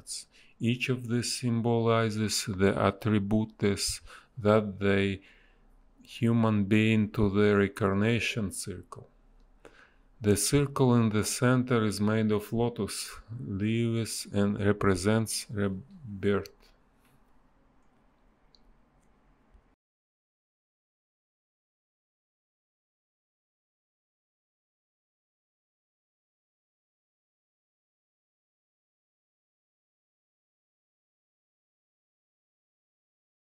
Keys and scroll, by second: 3.0 space, 5.2 space, 5.9 b, 8.8 a, 10.9 space, 14.9 space, 17.6 space, 19.1 b, 19.3 space, 22.1 a, 24.3 space, 26.1 space, 29.1 b, 29.3 space, 32.7 a.